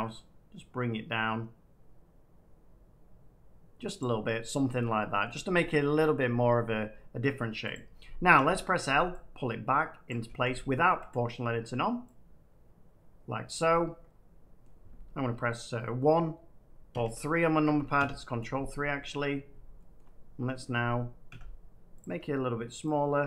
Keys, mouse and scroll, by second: 2.4-3.3 scroll down 4, 3.3 middle click, 3.9 click, 5.2 middle click, 7.6 click, 10.0 click, 10.2 ctrl+z, 11.0 click, 13.4 click, 14.5 middle click, 16.8 3, 17.9 ctrl+3, 18.9-19.6 scroll, 19.9 shift+middle click, 21.2 s, 21.9 click, 22.8 click.